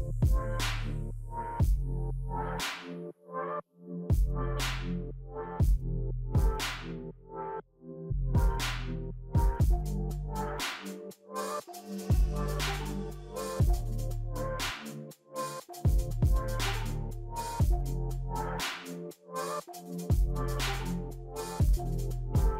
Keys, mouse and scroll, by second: 1.1 scroll down 3, 2.1-2.4 scroll down 3, 3.3-4.2 scroll down 7, 5.1-7.6 scroll up 26, 11.3 x, 11.9 b, 12.4 t, 15.4 typing.